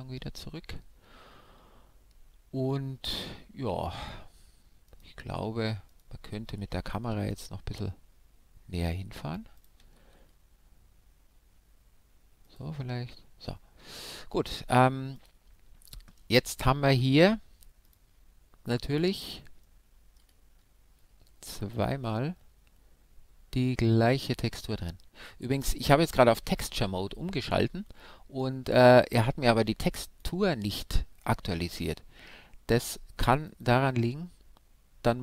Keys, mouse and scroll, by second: 4.9 right click, 5.9-8.2 right drag, 7.1 shift+f, 9.7-11.4 drag, 10.0 shift+f, 12.6-14.2 drag, 15.2-17.1 right drag, 16.9-18.8 drag, 19.6-21.9 middle drag, 21.9-23.9 drag, 23.9-29.3 middle drag, 30.0-32.9 right drag, 31.7-35.2 drag.